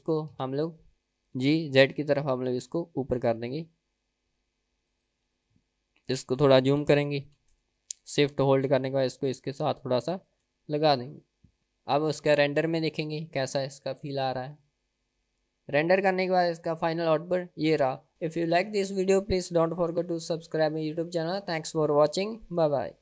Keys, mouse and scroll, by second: 0.6 KP_1, 1.6 g, 5.6-6.1 scroll up 2, 6.2 shift+middle click, 7.1 g, 11.1 click, 11.6 KP_0, 14.0 click.